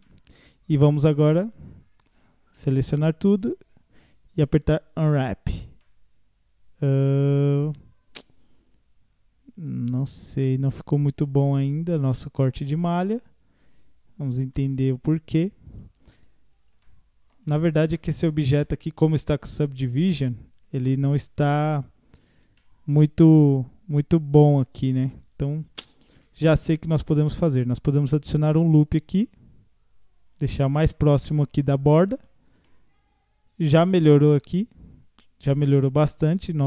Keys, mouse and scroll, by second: 0.0-1.1 middle drag, 1.1 a, 2.5 u, 5.8-8.8 middle drag, 10.0 scroll down 4, 10.6 scroll up 1, 10.7 middle click, 11.3-12.6 scroll up 1, 13.0-14.3 scroll down 1, 14.3 scroll down 1, 14.6-16.2 middle drag, 16.2-16.8 scroll up 1, 16.8 shift+middle click, 17.5 scroll up 1, 18.0-19.7 middle drag, 19.7 Tab, 20.4 scroll down 3, 20.7 Tab, 21.2-22.5 middle drag, 22.5 ctrl+r, 25.7 ctrl+z, 27.2 ctrl+r, 31.8-32.2 scroll up 1, 32.2 Tab, 32.7-35.7 middle drag, 36.1 Tab.